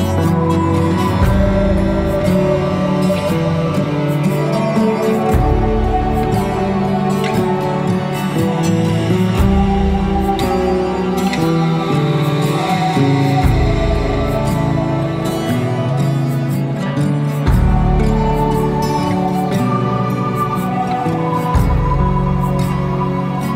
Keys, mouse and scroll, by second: 0.7 p, 2.8-4.7 drag, 5.2 click, 5.9-8.0 drag, 9.1 click, 10.5 middle click, 11.0-11.4 scroll up 2, 11.4-12.9 middle drag, 12.9-13.6 scroll up 2, 13.6-15.6 middle drag, 15.9 Tab, 17.5 click, 18.2 scroll up 1, 18.7-19.1 scroll down 1, 19.1-21.1 right drag, 21.1 click, 21.7 click, 22.4 shift+click, 23.2 shift+middle click.